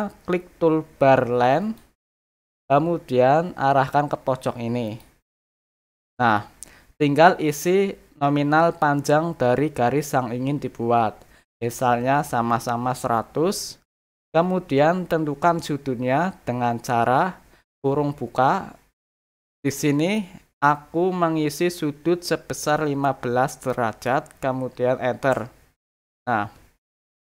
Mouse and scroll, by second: 1.6 click, 4.8 click.